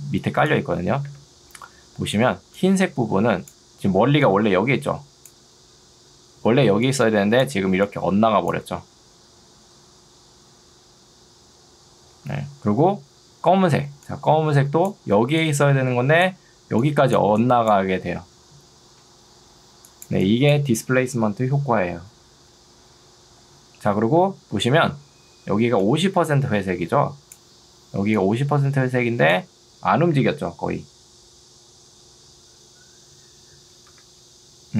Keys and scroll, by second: 1.2 Escape, 2.4 ctrl+2, 34.0 Escape.